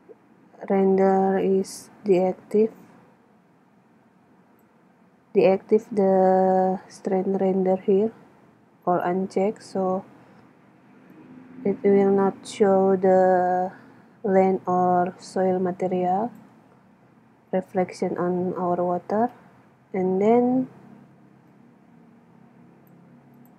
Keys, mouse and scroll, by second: 1.7-3.4 drag, 11.1-12.9 drag, 19.2-20.9 drag, 21.5-23.5 drag.